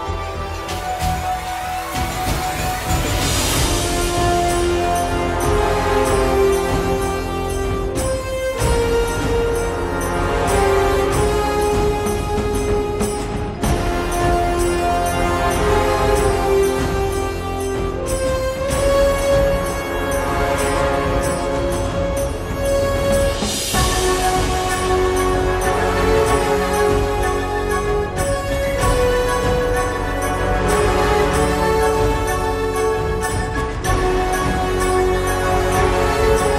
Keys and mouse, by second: 0.0 f, 0.8 click, 1.0 right click, 1.3 middle click, 1.3 f, 1.4-4.7 drag, 1.4-3.4 right drag, 4.7 middle click, 4.8-5.8 drag, 6.0-7.8 middle drag, 9.2 g, 9.3 f, 10.0 click, 10.6 middle click, 11.6 ctrl+s, 12.0 click, 12.6 alt+F3, 13.0 click, 13.4 KP_Divide, 14.6-16.0 drag, 16.6 middle click, 16.8-18.2 drag, 18.2 middle click, 18.2 click, 18.2 right click, 19.0 middle click, 19.1 click, 19.5 right click, 19.8 middle click, 20.0 click, 20.8 middle click, 20.8 right click, 20.9-22.0 drag, 21.3 right click, 22.2 middle click, 22.6 click, 22.6-23.9 right drag, 23.9 click, 24.1 middle click, 24.3 right click, 24.8 click, 25.2 KP_Divide, 25.5 1, 25.7 f, 26.2-29.7 drag, 29.5-31.1 typing, 30.3 click, 31.2-33.1 drag, 32.4 f, 33.1 middle click, 33.6-34.6 drag, 34.7 click, 35.2-36.5 drag.